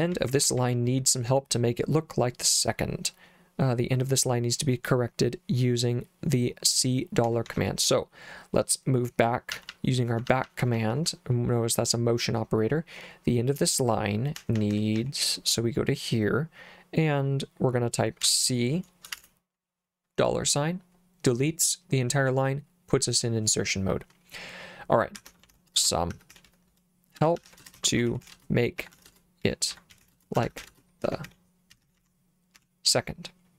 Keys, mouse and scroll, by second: 0.0-1.5 typing, 7.3 k, 7.5 k, 9.5-11.1 typing, 14.4 w, 14.6 w, 14.7 w, 15.0 w, 18.3 c, 19.2 shift+4, 24.9-32.6 typing.